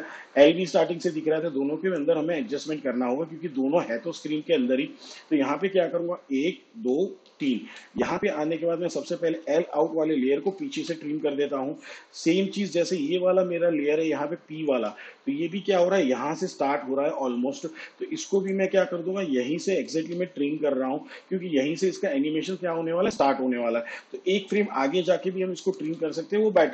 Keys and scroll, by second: 4.1 shift+/, 6.6 ctrl+Right, 11.0 alt+[, 20.3 alt+[, 24.7 ctrl+Right, 26.4 alt+[.